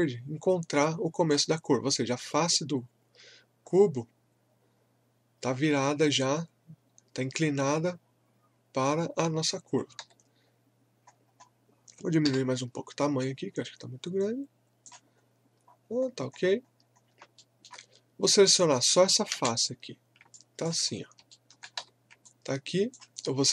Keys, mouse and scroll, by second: 10.0 w, 10.5 scroll down 1, 11.1-12.2 scroll up 1, 12.2 r, 12.5-12.8 scroll up 1, 13.2-15.1 drag, 15.1-15.5 scroll down 1, 15.7-16.0 scroll up 1, 17.4 alt+middle click, 19.3 space, 20.3 alt+click, 20.9 scroll up 1, 21.3 alt+middle click, 21.8 w, 22.2 alt+click, 23.3 scroll up 1.